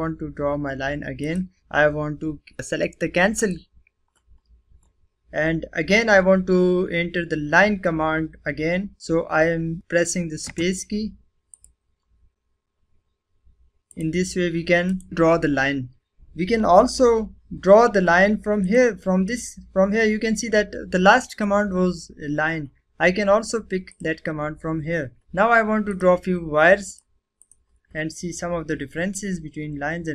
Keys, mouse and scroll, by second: 1.2 click, 1.6 right click, 3.3 click, 10.4 space, 11.5 click, 13.9 click, 14.8 right click, 15.1 click, 18.6 click, 23.9 click, 25.8 click.